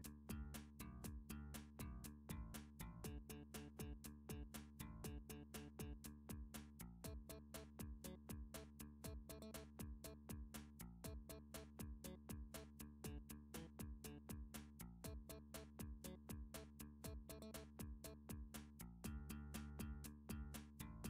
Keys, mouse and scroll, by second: 1.4 click, 2.6 d, 3.7 click, 4.7 s, 6.5 click, 7.4 g, 9.5 click, 12.3 d, 13.3 click, 14.3 s, 16.8 click, 17.6 g.